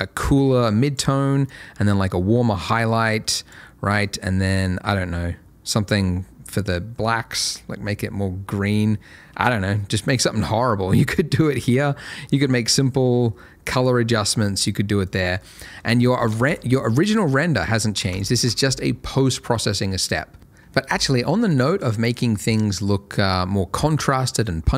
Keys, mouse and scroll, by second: 17.1 ctrl+shift+click, 18.1 ctrl+shift+click.